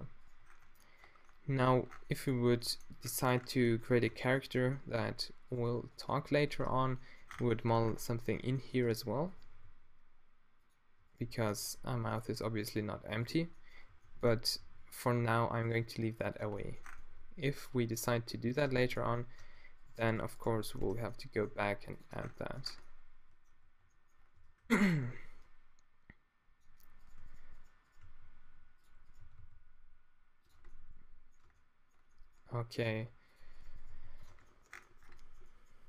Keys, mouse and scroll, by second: 2.4 Tab, 4.1 Tab, 5.5-7.1 drag, 6.6 q, 7.4 Tab, 8.8 Tab, 9.6 d, 10.5 click, 11.4 middle click, 11.9 b, 12.5 click, 13.0-15.8 typing, 17.8 g, 18.6 Tab, 19.4 Tab, 19.7 middle click, 20.9 q, 21.5 g, 21.9 click, 22.1 Tab, 22.2 click, 23.6 z, 24.3 Tab, 24.6 a, 24.8 b, 25.6-26.7 super+drag, 28.1 d, 29.2 g, 30.4 Tab, 30.6 middle click, 31.0 click, 31.4 Tab, 32.7-33.8 middle drag, 32.9 g, 33.9 g, 34.3 Tab, 35.4 middle click.